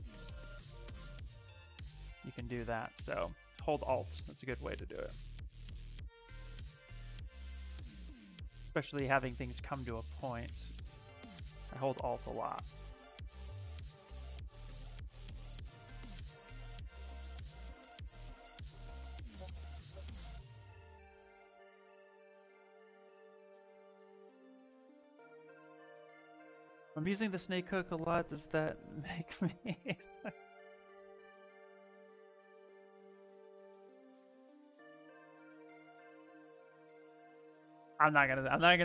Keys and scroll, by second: 23.3 z, 31.6 -.